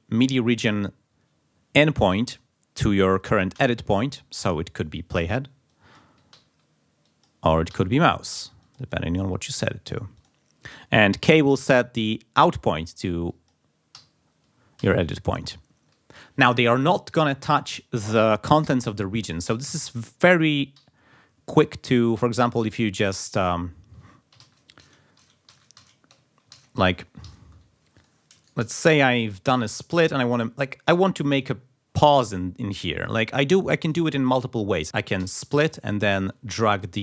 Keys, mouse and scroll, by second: 3.5 j, 4.4-5.5 drag, 5.7 click, 6.3 j, 7.0 click, 7.7 j, 8.6 click, 10.2 click, 12.1-13.2 drag, 13.3 click, 13.9 k, 14.8 k, 20.8 k, 21.5 click, 21.9 click, 22.6 click, 24.4 ctrl+z, 26.5 ctrl+z, 27.2 ctrl+z, 28.0 ctrl+click, 28.4 ctrl+shift+click, 29.1-30.6 drag, 34.8 ctrl+click, 35.2 s, 35.7 click, 36.3 click.